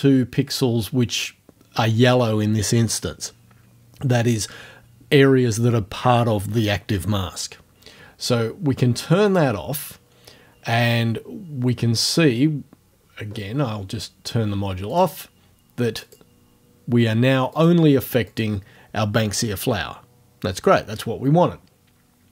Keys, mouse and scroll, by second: 9.3 click, 12.9-13.2 scroll up 1, 15.0 click, 16.0 click, 17.6 click, 18.3 click.